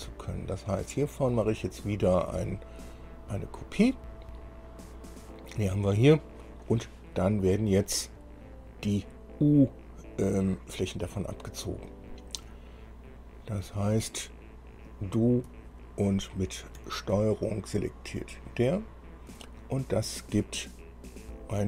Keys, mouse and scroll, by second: 0.1 click, 4.0 click, 4.8-5.1 scroll down 2, 6.0 click, 18.3 ctrl+click.